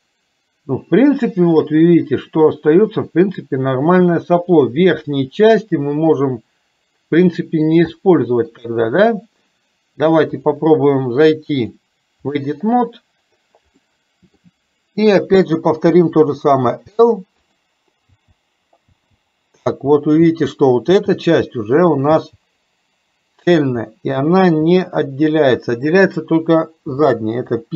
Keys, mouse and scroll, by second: 8.0 shift+middle click, 11.8 click, 13.9 middle click, 16.7 l, 17.5 click, 18.1 l, 19.3 l, 19.9 l, 20.7 l, 21.1 l, 22.2 l, 24.1 l, 24.7 l, 26.9 p.